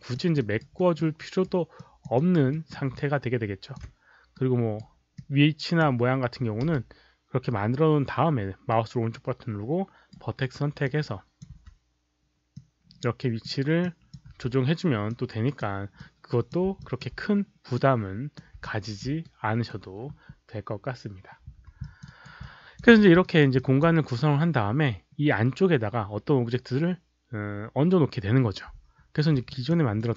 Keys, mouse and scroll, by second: 0.1 alt+click, 0.4 alt+right click, 0.4 5, 0.7 middle click, 1.2 alt+right click, 1.7 alt+click, 2.1 alt+right click, 2.5 alt+middle click, 2.9 alt+click, 4.3-4.8 right drag, 5.1-5.8 drag, 6.6 w, 8.7-10.1 right drag, 10.8 click, 11.4 alt+right click, 11.4 alt+middle click, 12.5 click, 13.8 click, 15.1-15.6 drag, 15.9-16.6 drag, 16.8 alt+click, 17.7-18.3 drag, 18.6 alt+click, 19.2-19.7 right drag, 21.8 alt+click, 22.0 alt+right click, 22.4-22.7 alt+drag, 22.8 q, 23.2 alt+right click, 23.5 alt+click, 29.5 alt+click, 29.9 alt+middle click.